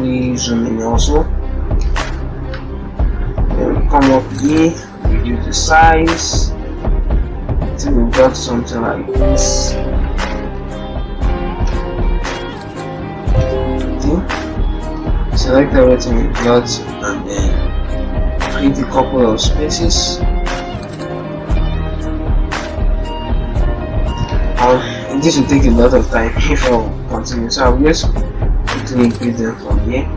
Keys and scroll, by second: 4.5 ctrl+t, 10.1 shift+Left, 10.7 shift+Left, 13.2 ctrl+Return, 14.8 alt+Down, 25.0 ctrl+t.